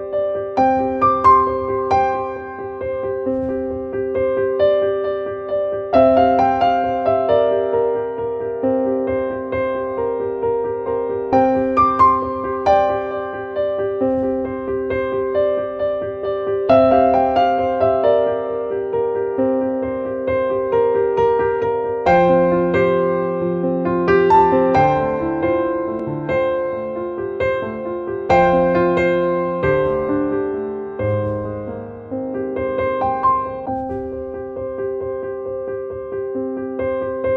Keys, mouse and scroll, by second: 1.4 click, 2.8 click, 3.4 Down, 8.5 Up, 9.4 Return, 12.0 click, 14.0 click, 15.1 ctrl+t, 15.9-20.4 drag, 20.4-21.6 drag, 21.6 Return, 23.4 click, 25.6 click, 26.6 click, 27.3 click, 36.8 click.